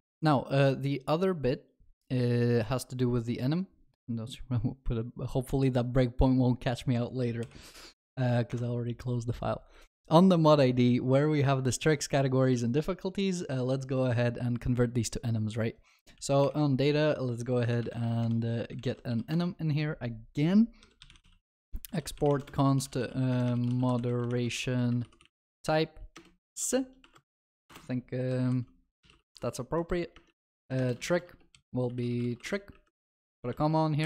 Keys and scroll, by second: 2.2 ctrl+F8, 7.5 ctrl+shift+n, 16.5 alt+Insert, 33.4 ctrl+d.